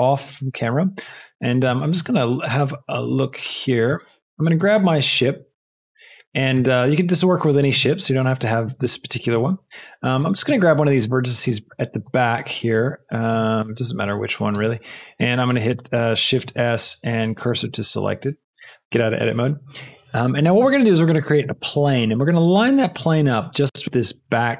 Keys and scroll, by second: 6.5 Tab, 16.5 shift+s, 18.7 shift+Tab.